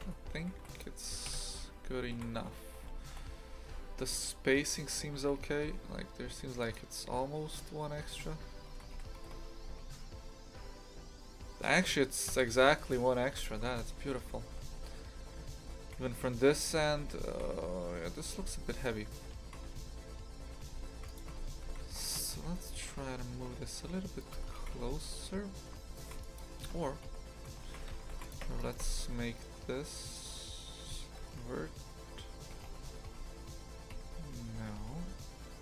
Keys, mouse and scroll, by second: 0.0 Tab, 0.3 shift+f, 1.2 KP_3, 2.1 shift+f, 5.1 shift+f, 7.4 Tab, 7.9 a, 8.1 a, 8.7 shift+d, 9.2 g, 12.9 Delete, 13.3 Tab, 13.6 shift+f, 21.3 Tab, 21.6 shift+f, 22.1 a, 22.7 g, 24.3 Tab, 24.5 shift+f, 26.7 ctrl+z, 27.0 ctrl+z, 27.6 shift+f, 28.4 Tab, 28.6 right click, 28.8 Tab, 31.1 ctrl+i, 32.5 g.